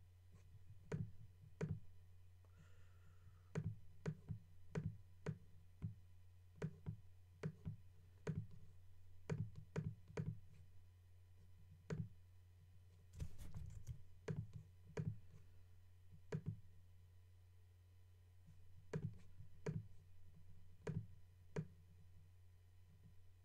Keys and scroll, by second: 13.7 super+z.